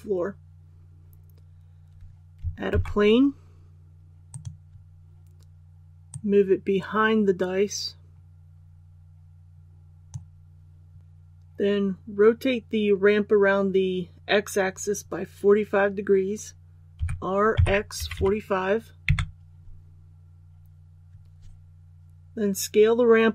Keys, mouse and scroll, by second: 2.6 shift+a, 4.2-11.0 drag, 16.9 r, 17.5 x, 17.9 KP_4, 18.1 KP_5.